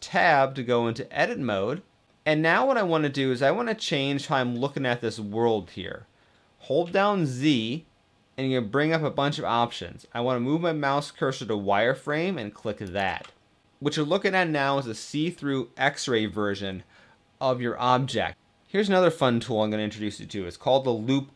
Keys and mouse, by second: 0.0 middle click, 2.4 middle click, 6.5 z.